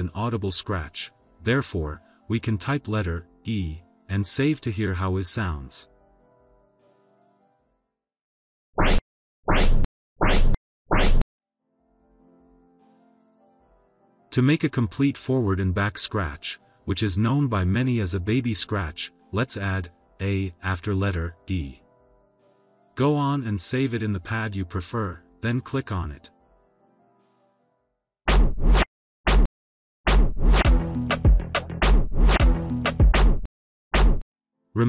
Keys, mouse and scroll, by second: 7.0 click, 8.6 click, 17.3 click, 18.0 click, 19.7 a, 26.3 click, 28.2 click.